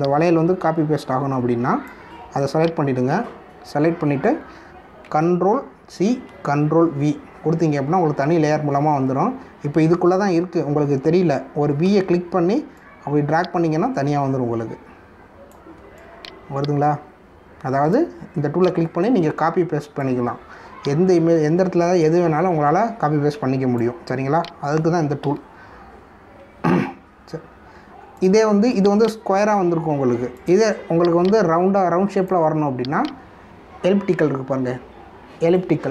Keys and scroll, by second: 6.0 ctrl+c, 7.3 ctrl+v, 12.8 v.